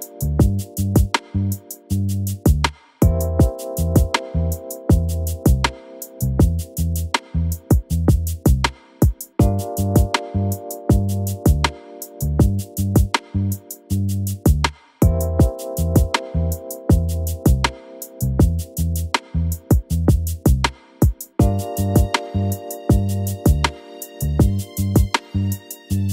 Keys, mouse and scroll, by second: 2.3 Tab, 3.4 Tab, 3.7 click, 4.4 Tab, 4.8 click, 5.0-5.7 scroll up 3, 5.7 click, 6.7 click, 7.3-9.5 typing, 9.8 ctrl+r, 11.8 click, 12.9 click, 13.7 click, 14.2 KP_1, 14.8 click, 15.1 shift+click, 15.6-16.0 scroll up 3, 19.1-19.8 scroll up 4, 19.8 click, 21.6 click, 23.2 e, 24.6 KP_3, 25.1 click, 25.3-25.8 scroll up 2, 25.8 click.